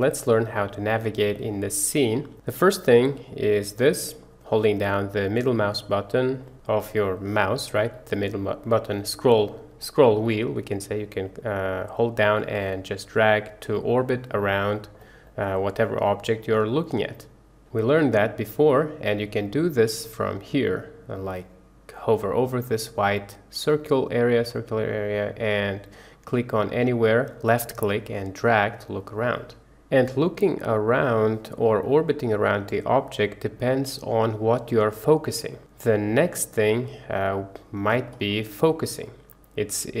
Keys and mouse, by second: 2.7-4.1 middle drag, 4.7-5.5 middle drag, 5.8-6.3 middle drag, 6.5 middle drag, 7.0-7.7 middle drag, 8.2-8.5 middle drag, 10.1-12.2 middle drag, 12.5-14.9 middle drag, 15.6-17.6 middle drag, 26.4-29.3 drag, 29.3 middle click, 29.9-31.2 middle drag, 31.5-34.0 middle drag, 35.6-36.6 middle drag, 37.2-38.0 middle drag, 39.0-40.0 middle drag.